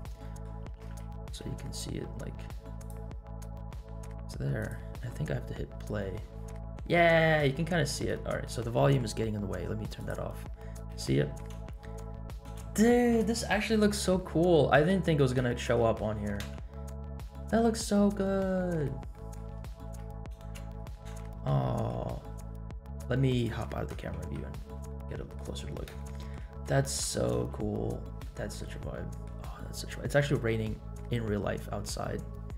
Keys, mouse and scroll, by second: 0.2 middle click, 0.7 g, 2.3 scroll down 1, 3.3-3.7 middle drag, 4.5 click, 5.2 space, 6.8 space, 7.0-7.7 scroll up 3, 7.7 shift+middle click, 8.3 scroll down 1, 10.0 click, 10.4-11.3 scroll up 2, 11.5 space, 12.4 space, 14.1-14.8 shift+middle drag, 15.2 scroll up 1, 15.5 shift+middle drag, 16.0-16.4 scroll up 1, 16.4 space, 17.5 space, 18.0 scroll down 2, 18.6-18.9 shift+middle drag, 19.1 shift+middle drag, 19.7 middle drag, 20.2 scroll up 1, 20.5 space, 21.1 space, 21.3 scroll down 2, 21.6-22.0 shift+middle drag, 23.3 click, 23.9 KP_0, 24.3 KP_Decimal, 24.9-25.4 middle drag, 25.6 scroll up 2, 25.9-26.4 shift+middle drag, 26.7 shift+middle click, 27.2 scroll up 1, 27.4 space, 28.3 shift+middle drag, 28.9 middle click.